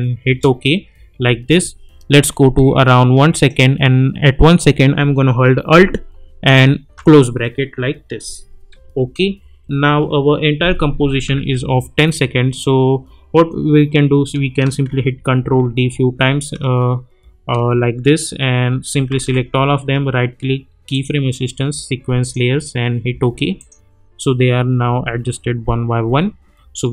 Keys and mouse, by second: 0.3 Return, 2.2-3.7 drag, 6.8 alt+], 8.7-9.8 typing, 14.9 ctrl+d, 19.1 ctrl+a, 19.8 right click, 20.9 click, 24.9 space.